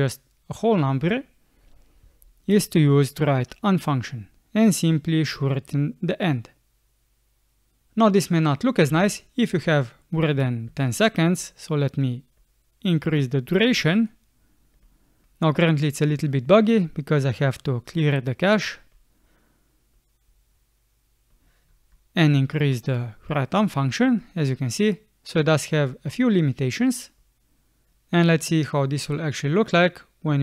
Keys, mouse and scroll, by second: 8.9 space, 10.9 space.